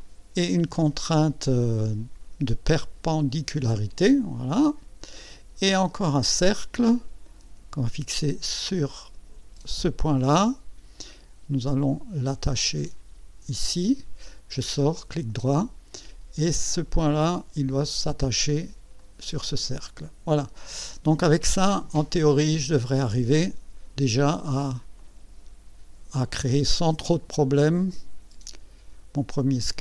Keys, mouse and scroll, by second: 2.7 click, 6.4 click, 9.7 click, 12.8 click, 14.9 right click, 16.6 click, 17.9 click, 19.0 click, 20.2 scroll down 2, 20.4-22.9 middle drag, 22.9-24.4 drag, 25.0-27.0 drag, 27.9-29.2 drag.